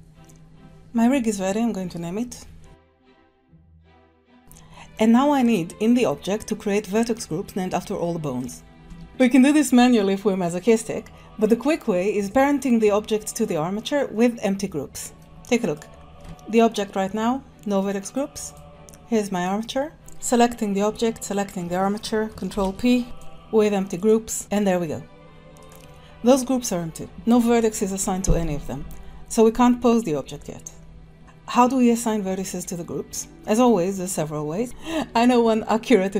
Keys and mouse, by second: 0.2-1.2 middle drag, 2.8-4.4 shift+drag, 4.2 BackSpace, 4.4-4.9 middle drag, 8.9 Tab, 15.0 click, 15.2 Tab, 16.2 ctrl+Tab, 21.2 shift+click, 22.5 ctrl+p, 25.5 ctrl+s, 25.6 click.